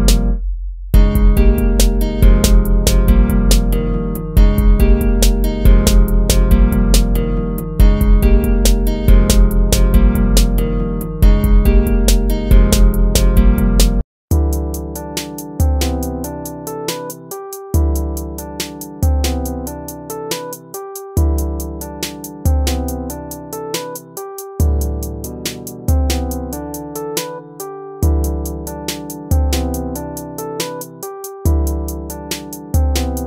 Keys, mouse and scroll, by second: 0.0 ctrl+-, 5.5 ctrl+z, 7.0 ctrl+z, 7.8 ctrl+z, 9.3 ctrl+-, 10.5 ctrl+z, 10.9 ctrl+z, 11.1 ctrl+z, 13.3 ctrl+-, 14.9 ctrl++, 15.8 ctrl+z, 17.5 ctrl+z, 17.7 ctrl+z, 19.0 ctrl++, 19.3 ctrl++, 21.3 ctrl+-, 21.8 ctrl++, 26.3 ctrl+-, 26.7 ctrl+-, 27.2 ctrl++, 28.2 ctrl+-, 29.0 ctrl++, 32.1 ctrl++.